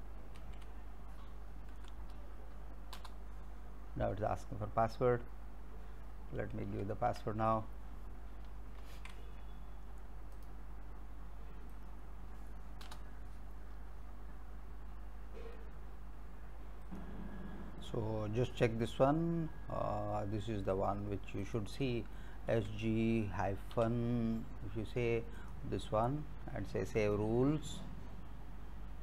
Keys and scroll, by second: 0.4 ctrl+c, 1.8 Up, 3.0 Return, 6.8 alt+Tab, 8.8 ctrl+c, 12.9 Return, 22.1-23.8 typing.